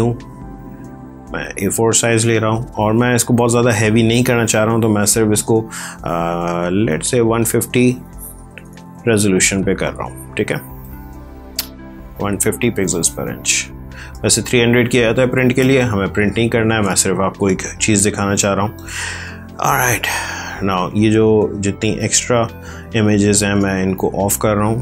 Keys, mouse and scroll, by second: 8.2 BackSpace, 9.5-10.7 typing, 14.0 space, 14.3 click, 14.5 space, 18.8 ctrl+Tab, 22.3-22.7 typing, 24.6 click.